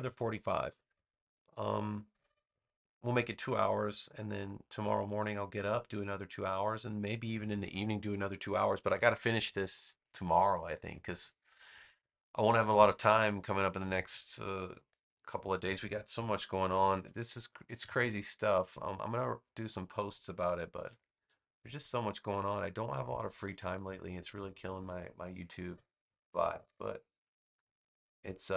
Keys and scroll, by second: 16.6 super+x, 17.2 space, 20.7 super+v.